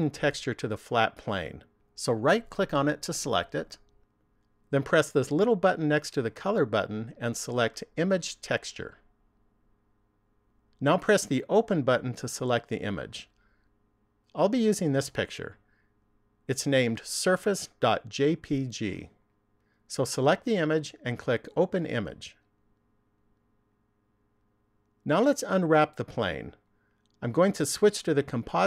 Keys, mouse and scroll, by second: 3.3 right click, 6.3 click, 12.9 click, 21.6 click.